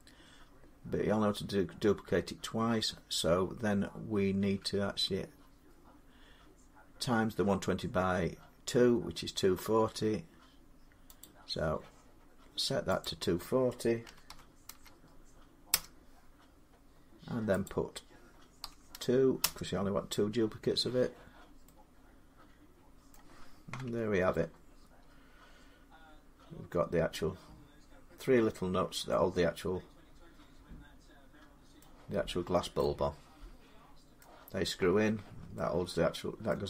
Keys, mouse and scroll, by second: 11.1 click, 12.9 click, 13.9 typing, 15.5 typing, 15.5 Return, 17.5 click, 18.5 typing, 19.3 Return, 21.1 Return, 21.1-22.6 drag, 22.9-28.0 middle drag, 23.7 Tab, 28.0 middle click, 28.5 scroll down 1, 31.4 scroll up 1, 31.6 middle click, 32.3 scroll down 1, 34.0 middle click, 34.0 scroll up 1, 36.4 middle click.